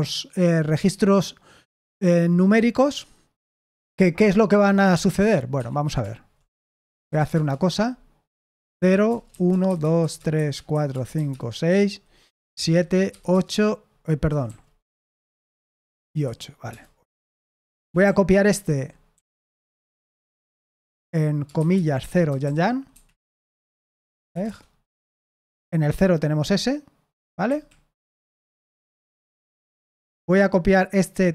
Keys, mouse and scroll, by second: 5.5 Escape, 6.2-7.5 typing, 8.7-13.0 typing, 12.5 Return, 13.2 Return, 14.2 Escape, 14.4-18.6 typing, 19.7 typing, 22.0-24.7 typing, 27.4 Escape, 29.7 typing.